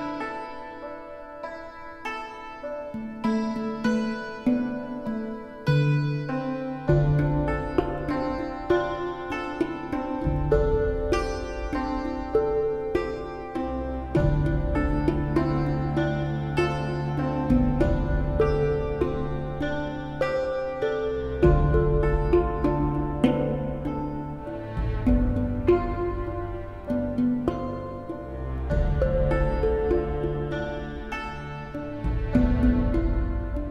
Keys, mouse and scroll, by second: 0.0 right click, 0.9 right click, 2.4 right click, 2.7 right click, 3.9 right click, 4.2 right click, 4.5 right click, 6.0 right click, 6.6 right click, 7.0 right click, 7.4 right click, 7.7 right click, 8.4 right click, 9.6 right click, 9.9 right click, 10.3 right click, 10.9 right click, 11.3 right click, 11.5 right click, 11.8 right click, 13.8 right click, 14.0 right click, 16.7 right click, 17.1 right click, 17.8 right click, 18.5 right click, 19.0 right click, 19.4 right click, 22.0 right click, 22.8 right click, 24.1 right click, 25.0 right click, 28.1 right click, 28.3 right click, 28.5 right click, 28.7 right click, 28.9 right click, 30.1 right click, 30.2 right click.